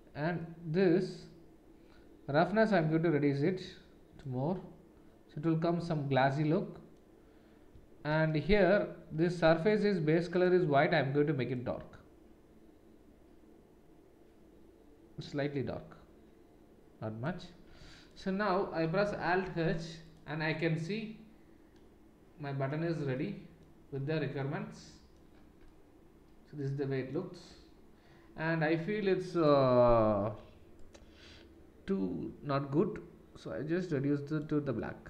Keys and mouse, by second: 10.4-20.1 middle drag, 19.2 alt+h, 20.1 click, 20.2-29.3 middle drag, 29.3 click, 29.4-35.0 middle drag.